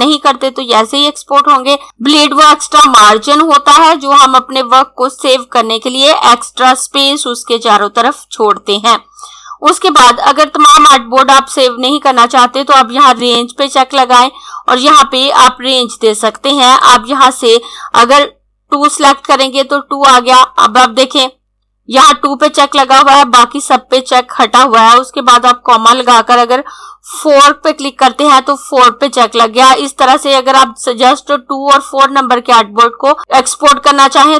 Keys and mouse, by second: 12.9 click, 15.9 click, 18.4 2, 24.8 ,.